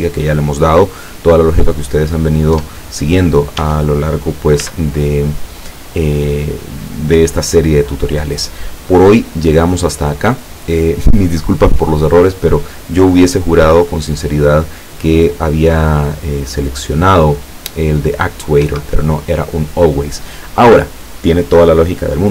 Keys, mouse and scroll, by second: 0.1-0.9 scroll up 2, 2.6 Tab, 3.6 Tab, 4.6 z, 6.7 click, 7.5 click, 13.8 right click, 15.1-16.0 drag, 16.7 click, 18.7 Escape.